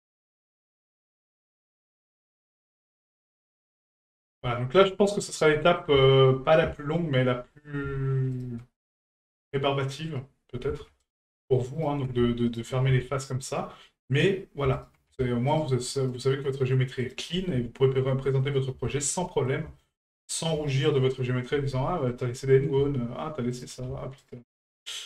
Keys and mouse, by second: 0.4 ctrl+right click, 1.0 ctrl+right click, 1.9 ctrl+right click, 2.6 ctrl+right click, 3.0 ctrl+right click, 3.5 shift+middle drag, 4.0 middle click, 4.7 shift+right click, 5.1 shift+middle drag, 5.6 middle drag, 6.0 shift+middle drag, 8.3 shift+right click, 10.1 ctrl+right click, 11.0 shift+right click, 11.8 ctrl+right click, 12.5 shift+right click, 13.3 ctrl+right click, 14.1 ctrl+right click, 14.7 shift+right click, 15.5 ctrl+right click, 16.0 ctrl+right click, 17.0 ctrl+right click, 17.8 shift+middle drag, 18.2 middle click, 18.8 shift+middle drag, 19.2 middle drag, 19.7 shift+middle drag, 20.1 middle drag, 20.8 shift+right click, 21.2 shift+middle drag, 22.1 ctrl+right click, 22.5 middle click, 23.5 shift+right click, 24.2 ctrl+right click, 24.5 middle click.